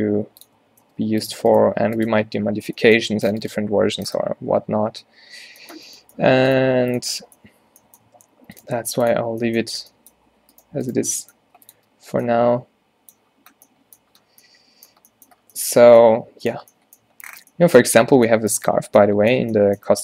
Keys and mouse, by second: 0.1 g, 0.7 Tab, 0.9 Tab, 1.1 g, 1.6 click, 1.7 g, 2.2 Tab, 3.1 drag, 3.9 Tab, 6.8 g, 7.1 Tab, 8.1 Tab, 8.8 g, 9.3 Tab, 9.9 Tab, 10.3 z, 11.1 z, 11.5 g, 11.8 Tab, 15.5 a, 15.8 a.